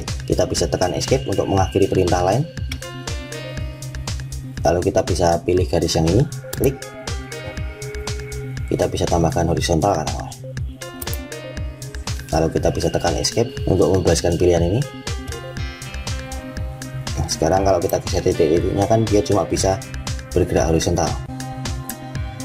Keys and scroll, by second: 0.9 Escape, 13.1 Escape.